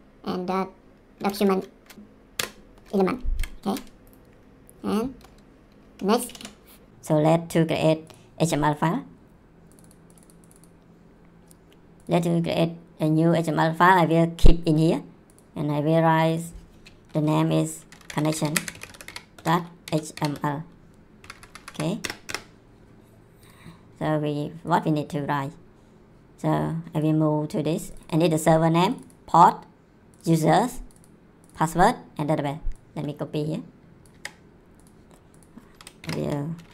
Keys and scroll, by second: 1.0-1.9 typing, 2.3 Return, 3.4 ;, 3.7 s, 6.1 Return, 17.7-20.8 typing, 21.2 Delete, 22.0 Return, 34.1 ctrl+c, 36.0 shift+,.